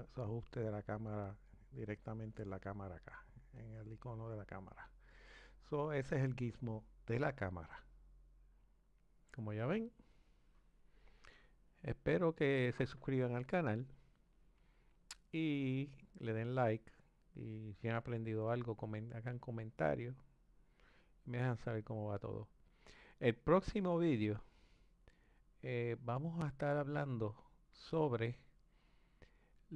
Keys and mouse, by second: 0.0 click, 2.1 click, 3.7 click, 8.5-29.7 drag.